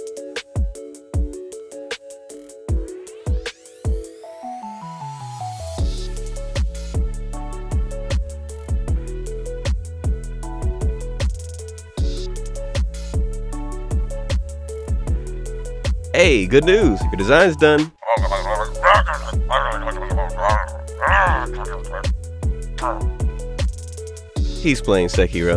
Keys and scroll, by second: 0.0 ctrl+alt+space, 0.7 ctrl+alt+space, 1.2 ctrl+z, 1.5 ctrl+alt+space, 1.9 ctrl+z, 2.4 ctrl+z, 2.6 ctrl+alt+space, 2.8 ctrl+s, 3.8 ctrl+space, 4.5 ctrl+z, 4.6 ctrl+alt+space, 4.9 ctrl+alt+space, 5.8 ctrl+space, 5.9 ctrl+z, 6.9 ctrl+z, 7.1 ctrl+z, 8.5 ctrl+z, 9.0 ctrl+alt+space.